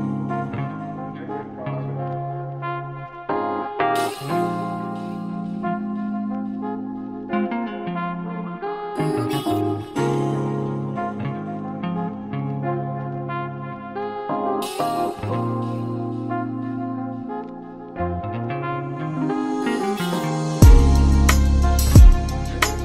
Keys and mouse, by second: 10.2-14.9 drag, 16.0-20.6 ctrl+middle drag, 20.6 alt+h, 22.6 click.